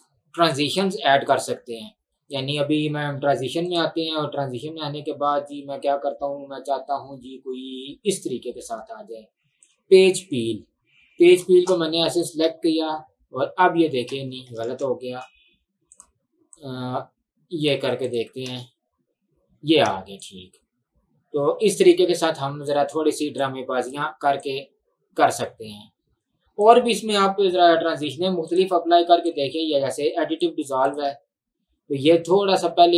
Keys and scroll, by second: 12.5 space, 14.2 space, 14.8 ctrl+z, 18.5 space, 19.9 space, 31.3 space.